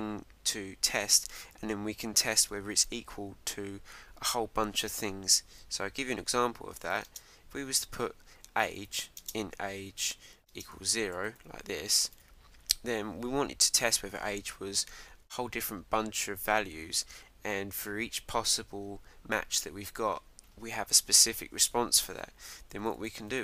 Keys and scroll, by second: 12.0 Return.